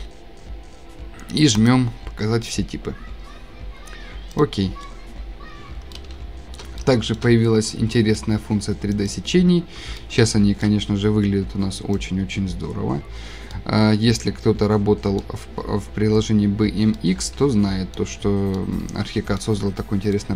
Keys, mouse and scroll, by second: 1.7 click, 4.4 click, 5.4 click, 5.5-6.6 scroll down 8, 6.6-7.2 shift+scroll, 7.7 scroll, 9.9 2, 10.3 shift+middle click, 10.6 shift+scroll, 12.5 scroll, 12.6 click, 13.3 click, 13.3 click, 13.4 click, 14.0 scroll, 15.1 shift+scroll, 17.2-17.9 scroll, 18.8 shift+scroll, 19.4 shift+scroll.